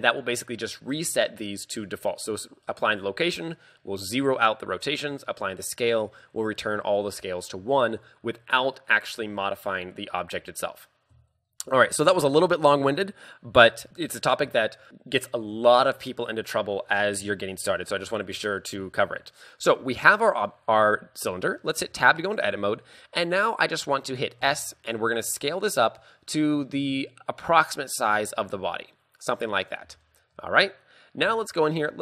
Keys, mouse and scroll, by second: 4.9 ctrl+a, 10.4 KP_3, 10.9-11.2 scroll down 4, 11.5 shift+middle click, 12.1 shift+middle click, 21.9 Tab, 24.5 s, 29.7 click, 30.1 shift+middle click, 30.5 scroll up 3, 31.8 a.